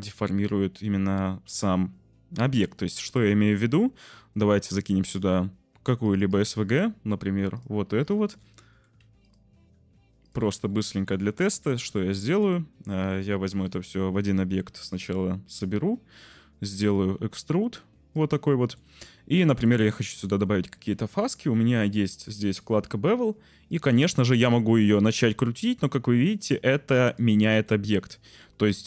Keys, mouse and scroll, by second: 2.4-5.2 middle drag, 8.0 shift+click, 8.7 g, 8.9 z, 9.1 click, 9.4 s, 10.7 shift+click, 11.7 Tab, 12.2 Tab, 13.6 ctrl+j, 16.7-18.1 shift+drag, 18.6 shift+click, 18.9 click, 20.3 shift+click, 23.6-27.1 shift+drag, 27.7 click, 28.1 shift+middle click.